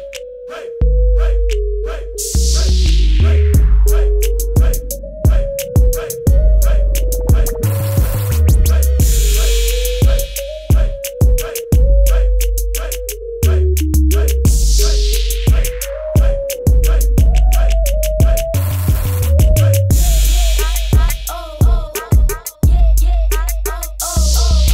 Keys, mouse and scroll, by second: 7.6 -, 8.6 click, 14.8 KP_Enter, 15.3 ctrl+KP_0, 16.0 click, 21.4 click.